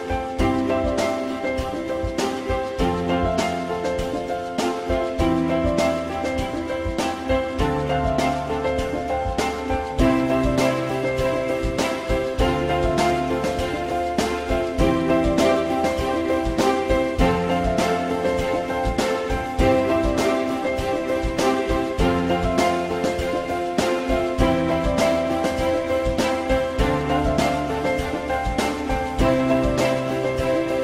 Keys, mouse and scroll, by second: 3.6 ctrl+click, 4.5 alt+middle click, 9.4 alt+middle click, 14.3 F4, 14.7 alt+middle click, 24.0 alt+middle click, 27.1 alt+middle click.